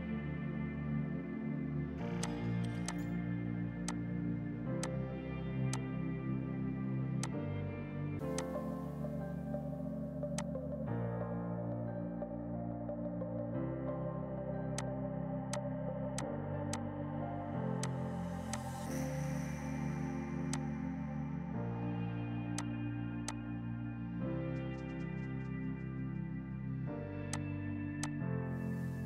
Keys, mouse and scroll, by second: 2.2 click, 4.8 shift+click, 5.7 shift+click, 7.3 click, 13.0 Page_Down, 13.7 F4, 14.8 click, 15.6 click, 16.2 click, 16.8 click, 17.9 click, 20.3 F2, 20.6 click, 21.7 click, 26.8 ctrl+g, 27.4 shift+click, 27.6 c, 28.1 shift+click.